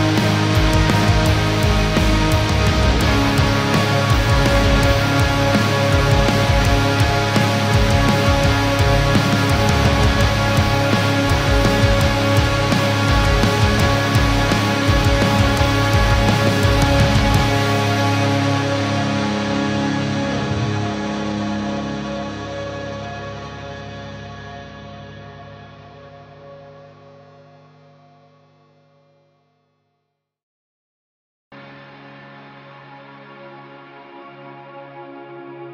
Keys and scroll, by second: 13.6 ctrl+-, 15.0 ctrl+0, 19.4 ctrl+-, 20.7 ctrl+0, 22.2 ctrl+-, 23.0 ctrl+0.